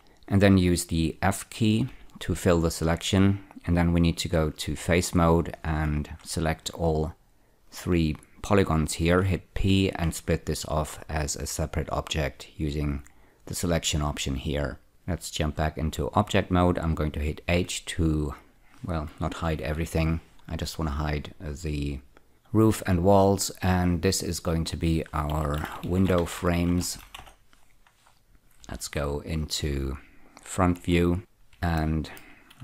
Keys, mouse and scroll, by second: 0.0-0.1 typing, 2.2 f, 5.0 3, 5.9 click, 8.0 shift+click, 9.8 p, 14.3 click, 15.6 Tab, 17.9 h, 20.0 ctrl+z, 22.2 click, 24.2 click, 24.4 double click, 25.9-27.3 typing, 27.5 Return, 28.9 F4, 30.0 click, 31.1 F4, 31.3-31.8 scroll down 1, 32.1 shift+middle click.